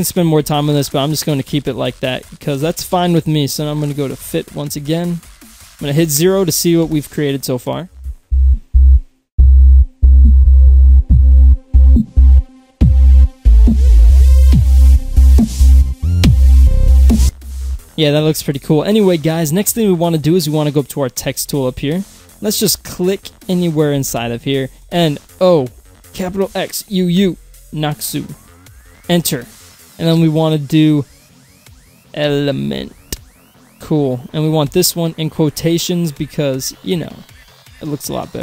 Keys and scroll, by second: 6.9 0, 24.7 Delete, 24.8 shift+n, 25.3 o, 26.2 shift+x, 26.9 u, 28.9 Return, 31.4-33.5 typing, 34.6 shift+;.